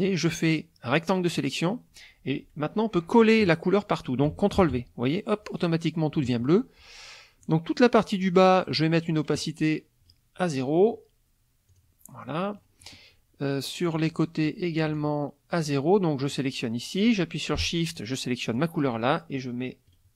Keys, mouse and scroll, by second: 0.4 click, 4.5 ctrl+v, 7.4 click, 10.0 click, 11.7 click, 12.3 click, 13.9 click, 15.0 shift+click, 16.3 click, 17.9 shift+click, 19.8 click.